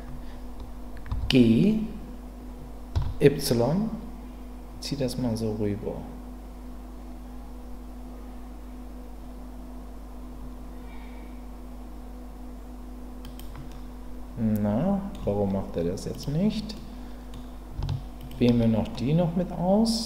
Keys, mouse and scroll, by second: 1.1 g, 2.9 y, 13.7-15.1 middle drag, 16.1 click, 16.7 middle click, 18.9-20.0 middle drag.